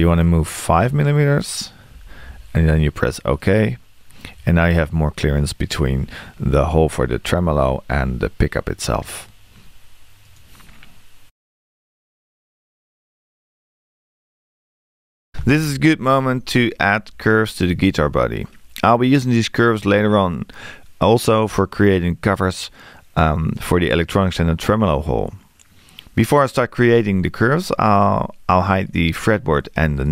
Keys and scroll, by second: 0.9 5.